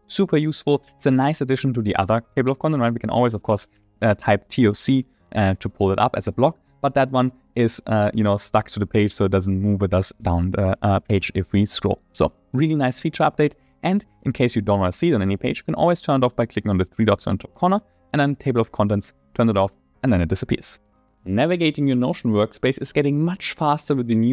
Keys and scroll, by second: 2.6 Return, 4.7 Return.